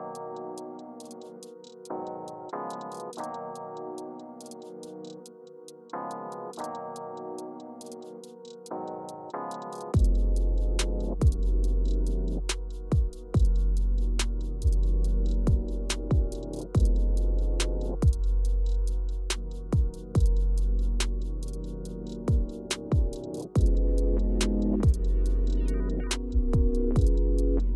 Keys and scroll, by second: 18.4 space, 20.5 o, 26.2 Return.